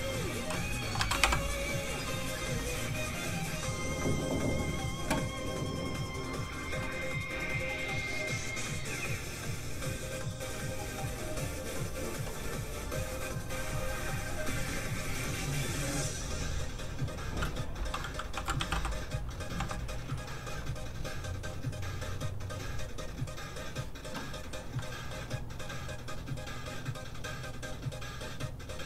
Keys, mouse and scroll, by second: 0.8 b, 1.0 a, 1.1 k, 1.2 e, 3.0 click, 12.4-12.8 scroll down 1, 15.7 click, 18.3 k, 18.5 e, 18.7 y, 19.5 m, 20.0 click.